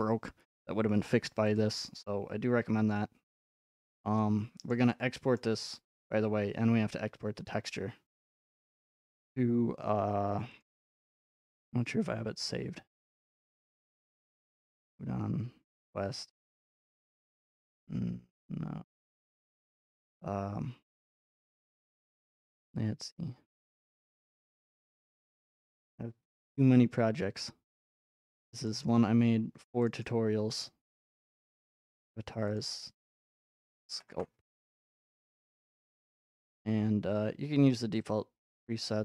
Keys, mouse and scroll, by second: 1.6-3.6 drag, 4.7 scroll, 5.4-6.4 shift+scroll, 9.0 click, 10.6 click, 11.8-12.8 scroll, 13.6 click, 14.7 click, 16.0-16.7 scroll, 17.7-18.2 scroll, 18.7-19.9 scroll, 22.2 click, 22.3 click, 23.1-23.7 scroll, 24.4 scroll, 26.6-27.9 scroll, 28.7 click, 28.8 click, 29.9 click, 30.0 click, 31.9 click, 32.1 click, 32.6 click, 33.4-34.0 typing, 34.1 Return, 37.1 scroll.